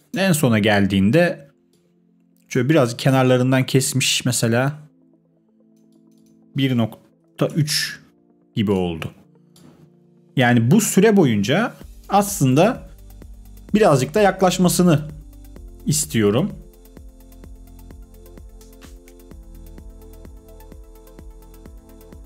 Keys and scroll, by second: 7.0-7.9 typing, 12.2 space.